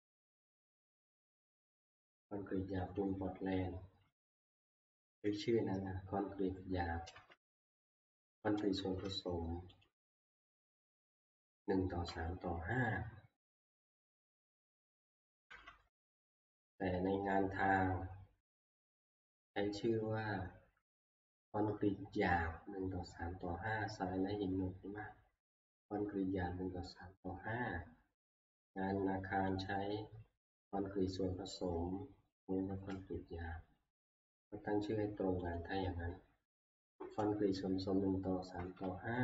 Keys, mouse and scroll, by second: 3.0 click, 4.2 alt+Tab, 7.1 alt+Tab, 8.8 alt+Tab, 9.8 click, 11.0 click, 15.5 Escape, 16.1 alt+Tab, 18.7 click, 20.6-23.7 drag, 29.7 click, 32.7 alt+Tab, 35.6 click, 36.9-38.5 Left, 38.8-39.2 Left.